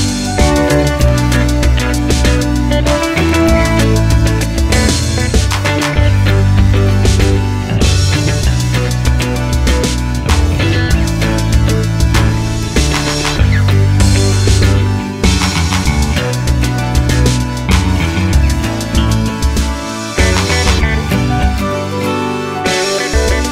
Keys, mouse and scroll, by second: 0.0 Tab, 6.5-14.3 drag, 14.3-17.1 middle drag, 15.6 KP_3, 17.1-20.1 drag, 21.0 ctrl+z.